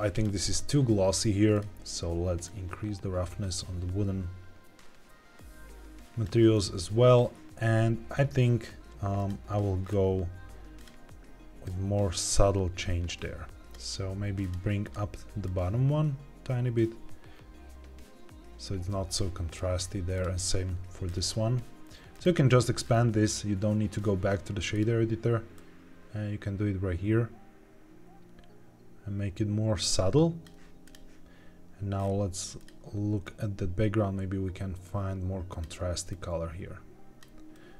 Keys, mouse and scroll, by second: 0.0 click, 1.4-6.2 drag, 9.1 click, 9.7-10.7 scroll down 2, 10.7 click, 14.7 click, 20.0 click, 21.0 scroll up 2, 22.0 click, 22.8 scroll down 2, 24.6 click, 30.7 click, 31.9-32.5 scroll up 2, 32.5 click.